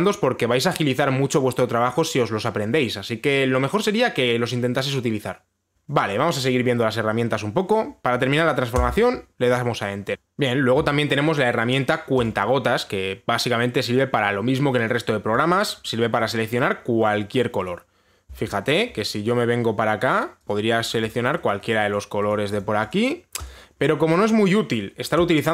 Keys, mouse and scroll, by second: 9.4 Return, 12.9 click, 16.3 click, 17.1 click, 17.7 click, 18.3 click, 19.2-19.8 scroll up 7, 19.8 scroll, 19.8 scroll up 3, 20.7 click, 20.7-21.1 scroll, 21.1 click, 21.5 click, 21.8 click, 22.2 click, 22.3 click, 22.6 click, 23.0 click, 23.2 click, 23.5 click, 24.1 click, 24.4-25.5 scroll.